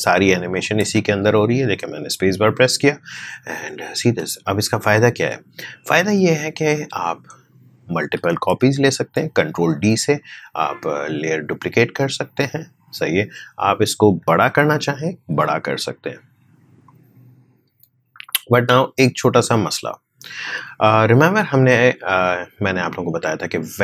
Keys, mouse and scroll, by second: 0.8 space, 4.0 space, 4.7-9.6 drag, 9.6 ctrl+d, 10.9-15.3 drag, 15.3 s, 16.8-22.8 drag, 22.8-23.8 drag.